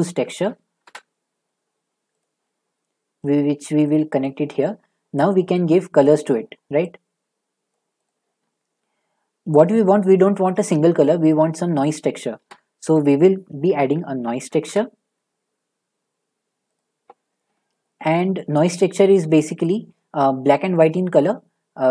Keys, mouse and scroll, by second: 0.0-0.8 typing, 2.2 click, 4.2 click, 6.1 click, 7.7 click, 8.1 click, 12.3 a, 12.9 click, 13.7-14.2 typing, 14.6 Return, 16.7 typing, 16.8 click, 18.1 shift+middle click, 19.6 click.